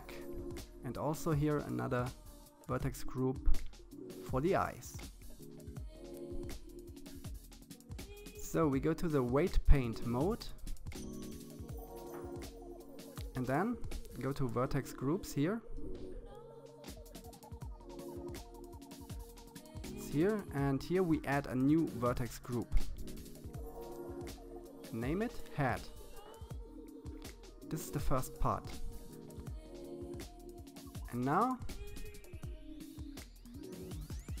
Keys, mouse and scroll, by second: 8.6-10.7 drag, 12.6 click, 18.2-18.6 scroll down 4, 18.9 click, 20.9-23.4 drag, 30.5 KP_1, 32.2-33.9 drag.